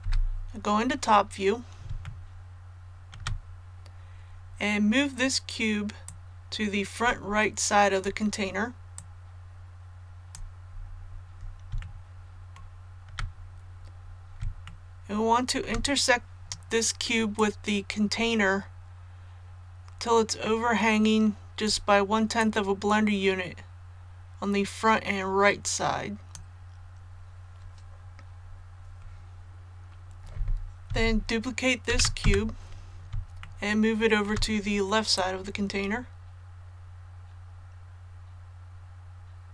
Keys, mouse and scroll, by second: 1.9 shift+middle click, 2.0-3.0 shift+scroll up 1, 6.0 click, 8.5-10.5 drag, 10.6 scroll up 1, 11.7 shift+middle click, 13.3 scroll up 1, 14.6 shift+middle click, 17.3-26.5 drag, 31.8 shift+d, 33.3 shift+middle click, 33.5-34.2 shift+scroll up 1, 35.1-39.5 drag.